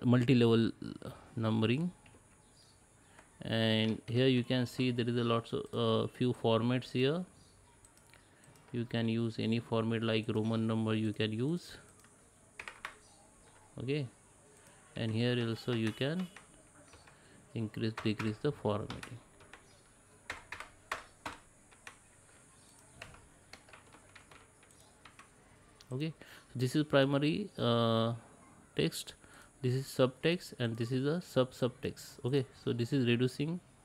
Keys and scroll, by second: 2.1 ctrl+z.